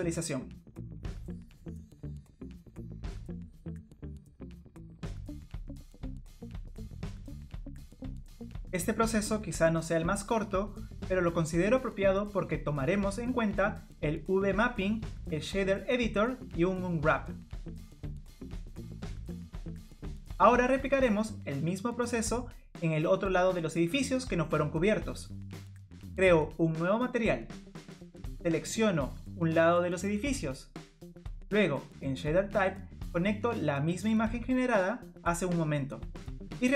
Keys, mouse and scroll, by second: 0.4 scroll down 1, 0.7 click, 0.7 middle click, 6.0 click, 7.0 middle click, 8.7 scroll up 2, 9.5 scroll up 1, 10.8 middle click, 14.3 scroll down 1, 16.2 click, 16.9 click, 18.6 Tab, 19.7 click, 20.6 middle click, 23.7 click, 26.2 middle click, 28.7-29.1 click, 29.0 click, 30.0 click.